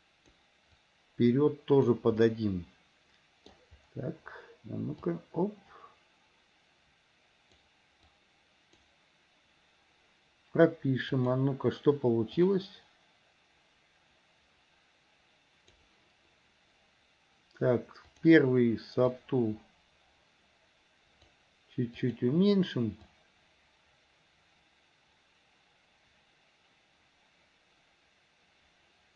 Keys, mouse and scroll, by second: 0.9 click, 2.4-3.7 middle drag, 5.1 click, 8.3 click, 11.3 click, 12.6-16.0 drag, 18.2 click, 19.3-21.4 drag, 22.2 click, 23.3-29.1 drag.